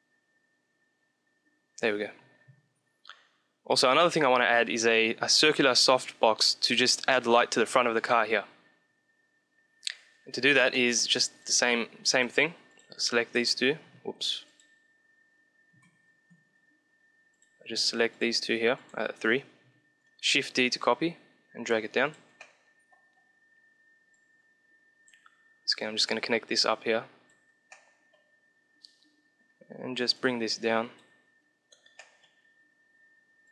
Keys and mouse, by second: 9.9-11.1 middle drag, 11.1-16.0 drag, 15.8 ctrl+x, 17.3-20.4 drag, 19.9 shift+d, 21.9-23.7 middle drag, 23.7-24.9 drag, 25.7-27.5 drag, 27.6-29.2 middle drag, 29.7-31.5 drag, 31.5-33.0 middle drag, 33.0 click.